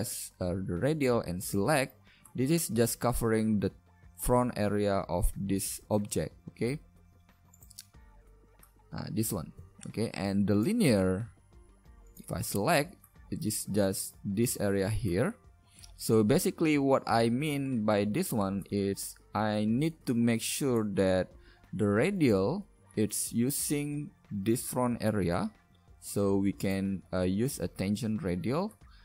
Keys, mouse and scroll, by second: 1.4 click, 2.2-11.1 middle drag, 11.1 click, 11.3 a, 13.0 middle click, 13.2 middle click, 23.6 middle click, 26.6-28.7 right drag, 28.8 middle click.